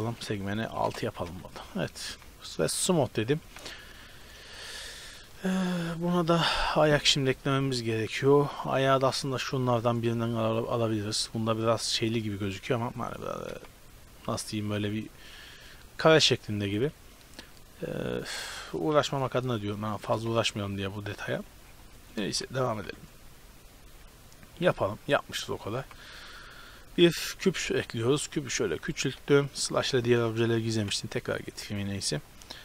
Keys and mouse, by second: 1.5 Tab, 2.9-4.3 drag, 3.7 a, 4.3 right click, 4.7-5.9 middle drag, 10.1 Tab, 13.7 Tab, 14.7 a, 18.3 right click, 19.1 KP_Divide, 20.3 Tab, 22.0-23.0 right drag, 22.5 shift+s, 22.9 Tab, 23.2-25.5 middle drag, 25.9 shift+a, 27.7 s, 29.0 s, 30.8 KP_Divide, 32.1-32.6 right drag.